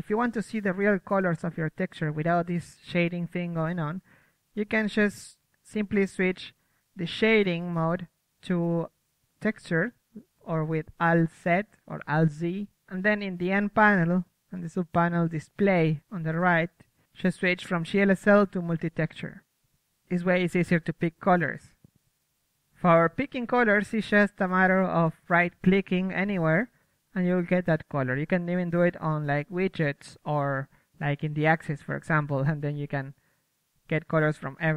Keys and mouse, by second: 0.4-1.6 drag, 0.4 KP_1, 1.0 f, 4.0-6.0 drag, 6.5 t, 6.9 t, 7.2 n, 8.3-9.7 drag, 10.3-11.8 drag, 11.8-13.1 middle drag, 13.1-14.7 drag, 14.7-16.6 middle drag, 16.0 KP_3, 16.6-19.0 drag, 20.7-34.1 right drag, 21.8 KP_1, 33.7-34.7 drag, 34.3 ctrl+z, 34.6 right click.